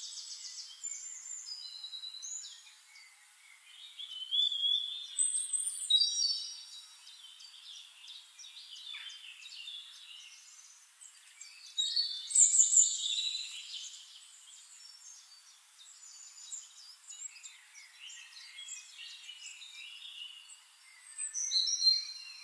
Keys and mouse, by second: 3.4 middle click, 3.4 right click, 8.5-11.7 typing, 12.7 ctrl+a, 14.7-17.0 drag, 16.7 space, 20.2-21.7 typing.